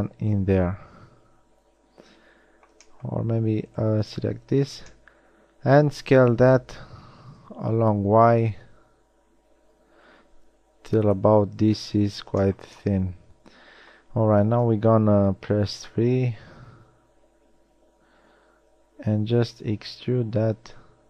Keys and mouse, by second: 7.3 s, 12.6 middle click, 13.4 middle click, 15.1 KP_1, 15.5 KP_3, 18.9 e.